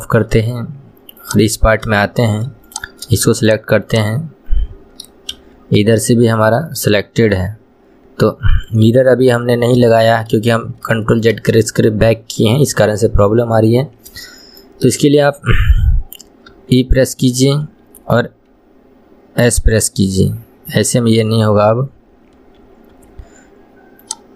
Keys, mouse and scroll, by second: 1.3 click, 1.8-2.1 scroll up 1, 2.1 shift+middle click, 2.8 click, 3.5 shift+click, 4.0 shift+click, 5.5 KP_1, 5.9 scroll down 1, 7.5-9.1 middle drag, 9.1 KP_1, 9.5-10.1 scroll up 2, 10.1-12.9 shift+middle drag, 12.9 KP_1, 14.0 scroll up 2, 14.4-16.7 shift+middle drag, 16.7 e, 24.2 click.